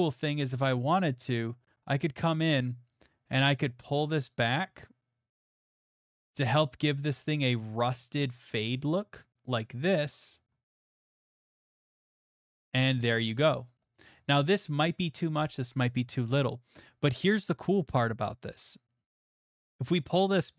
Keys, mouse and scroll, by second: 2.7 click, 10.2 click, 10.5 middle click, 11.0 middle click, 11.2 shift+middle click, 13.1 middle click, 13.2 middle click, 13.3 middle click, 13.8 shift+middle click, 14.0 middle click, 14.9 middle click, 15.3 middle click, 16.0 middle click, 16.3 shift+middle click, 19.0 scroll.